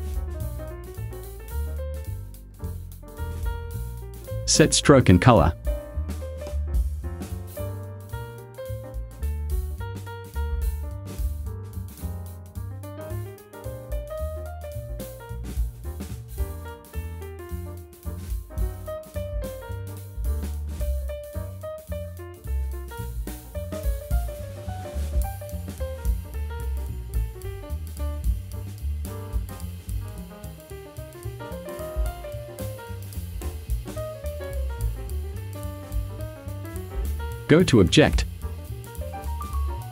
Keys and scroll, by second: 0.2 Tab, 0.9 0, 1.2 ,, 1.9 Return, 31.0 a.